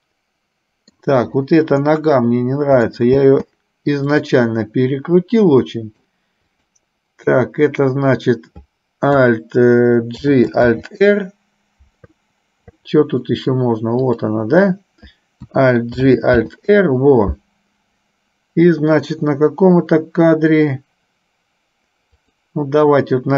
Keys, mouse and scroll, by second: 2.0-3.1 middle drag, 3.3 space, 4.3 click, 5.8 middle click, 6.6 click, 10.4 alt+g, 11.0 alt+r, 13.4 middle click, 14.3 click, 16.1 alt+g, 22.4 click.